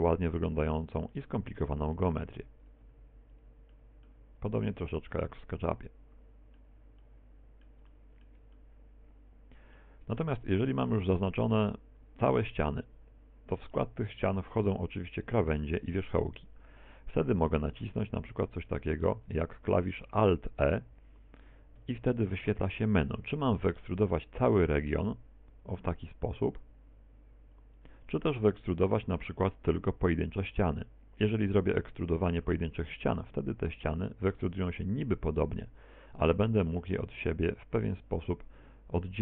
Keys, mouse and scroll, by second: 0.0 right click, 0.9 click, 1.1 middle click, 2.0 middle click, 2.7 right click, 2.9 e, 3.4 click, 3.7 middle click, 4.9 right click, 5.0 e, 5.5 middle click, 5.5 click, 7.0 middle click, 7.9 shift+middle click, 8.5 middle click, 10.2 shift+middle click, 11.4 right click, 18.4 right click, 18.9 shift+right click, 19.3 shift+right click, 19.9 shift+right click, 21.9 alt+e, 28.0 click, 29.1 alt+e, 35.5 click, 36.1 right click, 36.7 click, 38.1 right click.